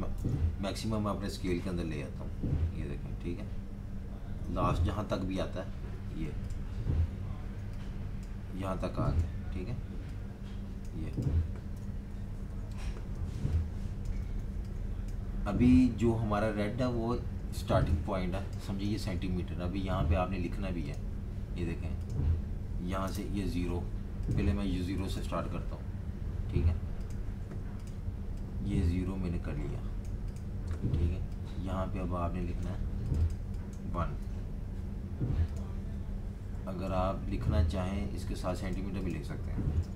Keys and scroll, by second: 0.2 super+-, 0.4 super+d, 0.9 super+d, 1.0 super+d, 1.1 super+d, 1.2 super+d, 6.0-7.2 typing, 8.3-9.0 typing, 11.8 super+-, 12.0 super+-, 12.3 super+-, 12.5 super+-, 13.3-15.5 typing, 17.6-19.3 typing, 23.0 0, 34.2 1, 36.1 Left, 36.8 Right, 39.4-39.9 typing.